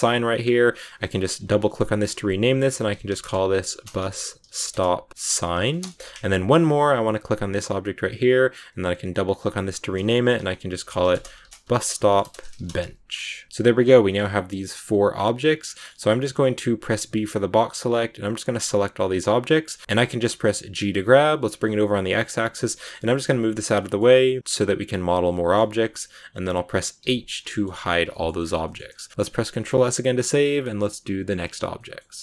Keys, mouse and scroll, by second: 0.4-5.7 drag, 7.1 right click, 9.2-13.5 drag, 13.5 BackSpace, 14.4 click, 14.8 click, 15.2 click, 15.5 scroll down 4, 15.6 middle click, 15.9 a, 19.2-19.6 scroll down 1, 19.6 shift+middle click, 19.8 scroll up 7, 19.8-20.5 scroll down 4, 20.7 g, 22.4 scroll down 3, 22.6 g, 23.7 middle click, 24.4-25.3 scroll up 1, 25.3-26.9 shift+middle drag, 26.9 h, 27.4 shift+middle click, 28.3-28.9 scroll up 4, 28.5 shift+middle click, 28.9-31.2 middle drag, 31.2 a, 31.7 middle click.